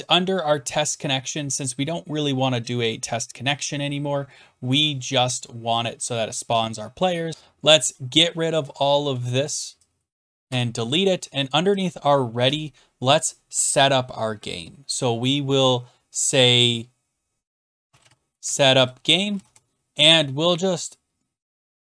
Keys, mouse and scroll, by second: 4.8 scroll down 3, 5.3 scroll up 4, 8.3 shift+click, 8.7 shift+click, 9.6 click, 10.3 click, 10.5 BackSpace, 11.5 click, 11.8 click, 12.5 Return, 12.5 shift+click, 17.3-19.8 typing.